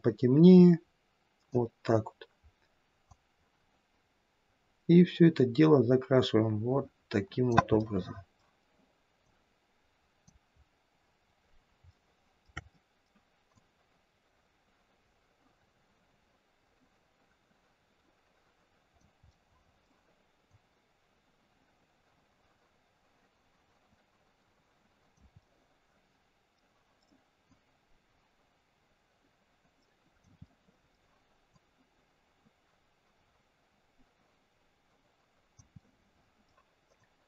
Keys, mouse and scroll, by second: 2.4-3.6 scroll down 1, 3.6 click, 7.8 middle click, 10.0 click, 10.6-11.7 scroll up 2, 11.7 scroll up 2, 11.9 shift+middle click, 12.7 middle click, 13.6 click, 19.3 middle click, 20.6 click, 25.4 middle click, 27.6 click, 30.5 middle click, 31.7 click, 35.8 middle click, 37.1 click.